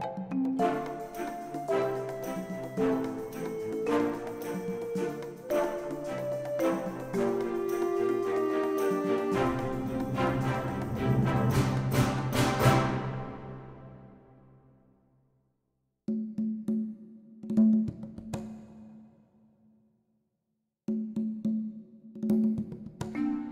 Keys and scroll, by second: 0.2 shift+z, 1.3 Tab, 1.9 a, 5.2 Tab, 7.4 Tab, 13.9 2, 18.6 ctrl+b.